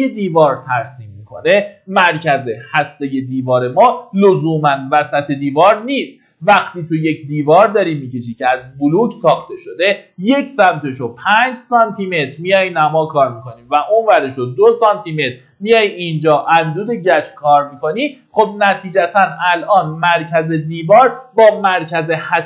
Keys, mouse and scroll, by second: 16.3-22.4 drag.